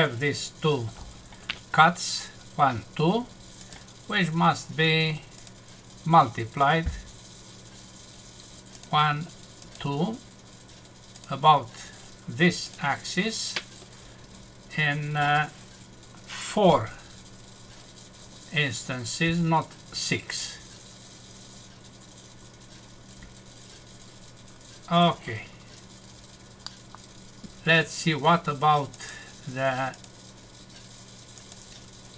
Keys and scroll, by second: 26.6 F6.